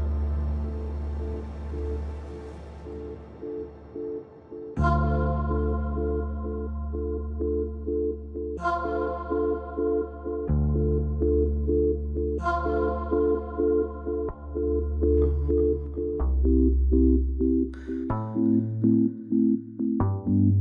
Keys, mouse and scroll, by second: 8.7 right click, 10.1-14.0 drag, 14.1 ctrl+z, 15.2-18.0 drag.